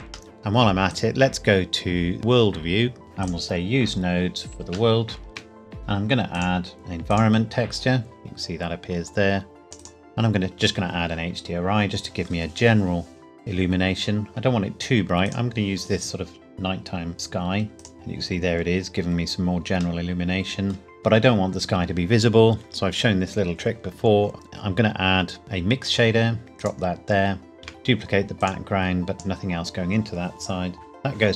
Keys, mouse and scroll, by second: 0.3 middle click, 0.4 shift+a, 0.9 click, 4.9 shift+middle click, 6.3 click, 9.6 click, 15.2 click, 17.8 click, 18.6 scroll up 1, 20.0 middle click, 21.4-23.3 scroll down 1, 25.8 click, 27.6 shift+d, 28.4 click.